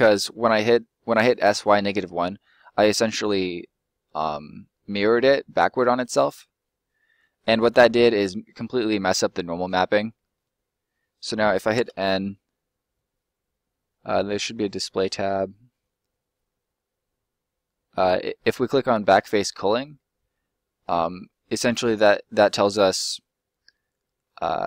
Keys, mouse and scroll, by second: 0.0 middle click, 5.4 scroll up 1, 5.7 middle click, 6.2-6.6 scroll up 1, 6.6 middle click, 8.3 middle click, 9.2 middle click, 11.7 n, 12.4-13.8 scroll down 1, 14.3 click, 14.7-17.0 scroll down 1, 18.2 middle click, 19.2 click, 20.3 middle click, 22.5 middle click.